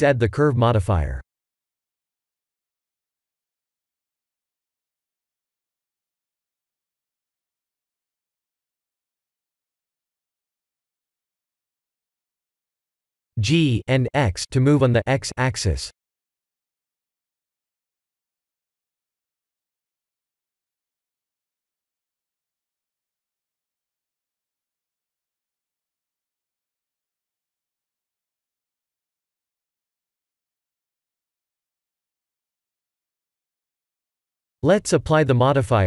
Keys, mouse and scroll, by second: 0.1 click, 0.5 click, 5.2-6.6 scroll down 12, 6.6 click, 11.0 KP_1, 11.9-12.3 scroll up 3, 12.3 scroll down 1, 13.1 scroll up 2, 13.6 g, 20.2 click, 21.3 click, 23.1 click, 24.2 click, 26.3 click, 26.8 middle click, 26.9 middle click, 27.4 middle click, 27.5 middle click, 28.0 shift+middle click, 28.6 middle click, 28.7 middle click, 29.3 middle click, 31.1 click, 33.1-33.8 scroll up 2, 33.8 middle click, 33.9 middle click, 34.3 scroll down 2, 34.8 middle click, 34.9 middle click.